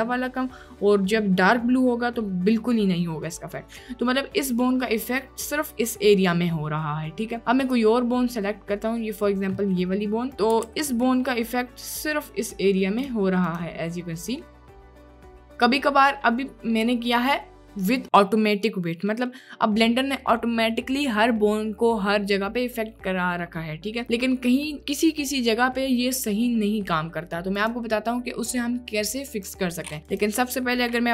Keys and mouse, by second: 5.3 click, 7.6 click, 8.5-8.8 middle drag, 9.6 click, 11.1 ctrl+z, 11.1 click, 11.9 click, 13.6 click, 14.5 click, 15.4 click, 15.7 middle click, 19.1 middle click, 22.9-23.3 middle drag, 23.6 middle click, 27.6-29.5 drag, 30.1 click.